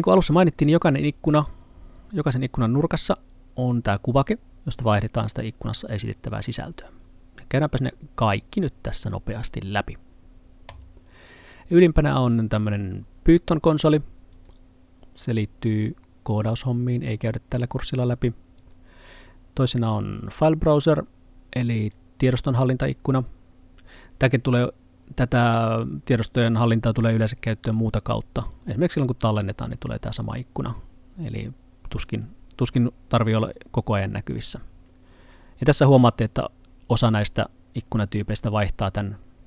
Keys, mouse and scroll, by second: 10.7 click.